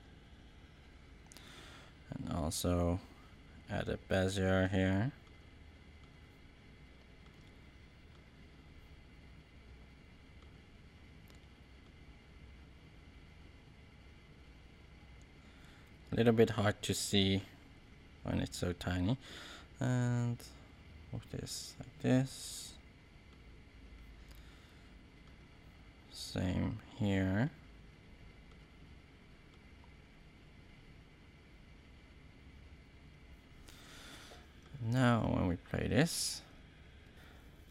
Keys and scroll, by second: 34.9 space.